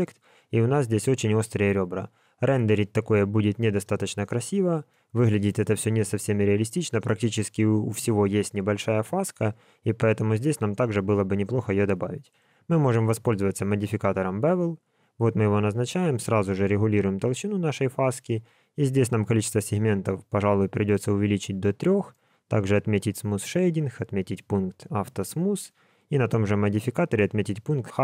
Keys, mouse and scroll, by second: 1.6 middle click, 4.0 click, 4.9 middle click, 10.4 click, 11.6 click, 12.7 click, 13.5 click, 16.2 shift+click, 19.1 click, 19.6 click, 22.0 right click, 23.7 click, 24.5 click, 25.0 click, 25.8 click, 27.8 click.